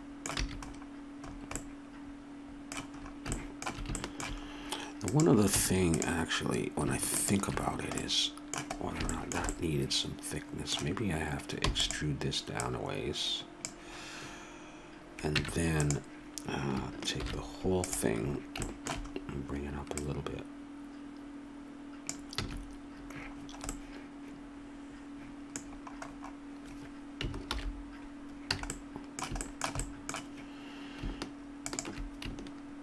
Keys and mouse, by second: 0.4 a, 5.5 Tab, 11.7 e, 12.5-14.4 drag, 15.3 Tab, 17.2 shift+g, 20.0-21.8 drag, 22.4 a, 27.4 alt+h, 28.5 a, 31.6-32.8 middle drag.